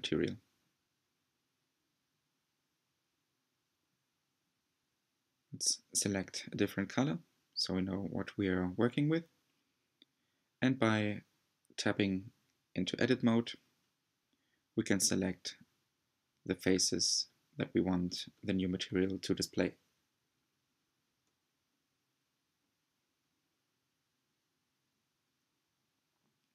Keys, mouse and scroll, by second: 7.0 click, 8.5 Tab, 9.7-10.2 scroll up 2, 10.4-14.3 shift+middle drag, 14.3 alt+click, 14.6 middle click, 15.3 alt+click, 16.1 middle click, 16.9 alt+click, 17.4-19.2 middle drag, 19.7-22.4 alt+shift+drag, 22.4 c, 23.4-24.2 scroll down 5, 24.2-26.5 middle drag.